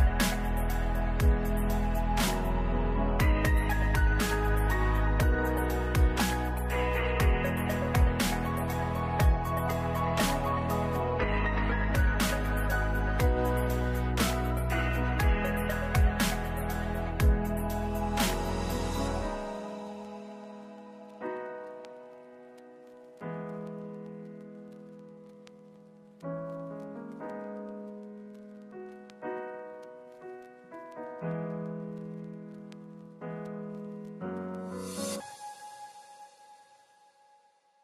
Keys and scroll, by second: 4.8 ctrl+s, 8.8 n, 9.0 space, 30.2 space, 37.7 ctrl+s.